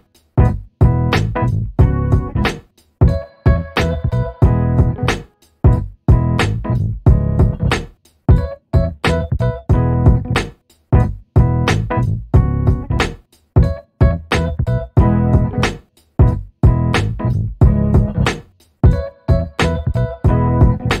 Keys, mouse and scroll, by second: 3.1-4.5 ctrl+shift+drag, 5.1 shift+click, 6.3 ctrl+KP_Subtract, 7.0 typing, 8.1 click, 8.7 shift+click, 10.7-13.8 drag, 14.6 click, 15.6-18.6 drag, 19.1 click, 20.1 ctrl+d.